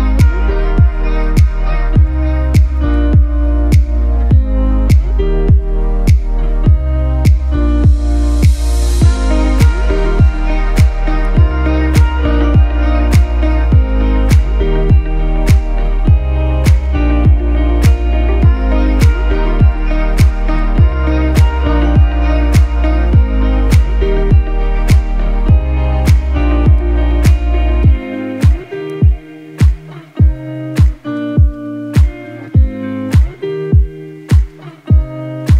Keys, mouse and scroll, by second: 12.4 click, 24.4 click, 26.3-26.8 scroll down 1, 26.8 click, 29.5 click, 33.6 click.